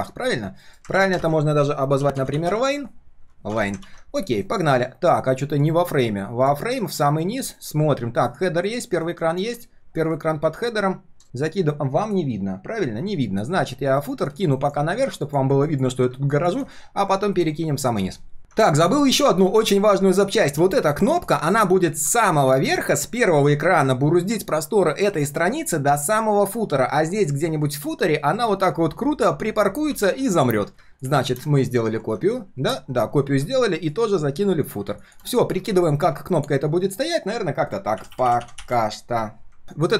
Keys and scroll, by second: 0.6 alt+l, 0.9 ctrl+g, 1.1 ctrl+r, 3.8 ctrl+s, 4.4 alt+l, 6.8 ctrl+shift+[, 7.4 alt+l, 8.9 ctrl+], 9.1 ctrl+], 9.3 ctrl+], 9.4 ctrl+], 14.6 ctrl+shift+].